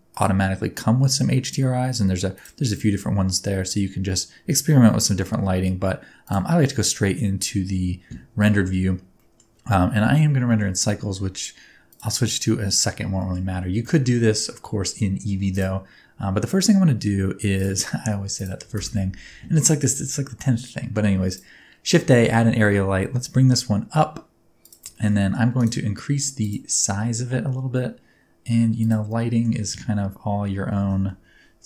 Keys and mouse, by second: 0.1-2.6 drag, 2.8-5.1 middle drag, 6.2 click, 7.2 middle click, 9.1 middle click, 10.4 middle click, 11.8 click, 13.2 middle click, 13.9 shift+middle click, 14.9 middle click, 17.5 right click, 18.7 shift+a, 22.6 g, 22.9 z, 24.6 click, 24.9 shift+middle click, 25.2 middle click, 25.6 right click, 28.7 click, 29.2 middle click.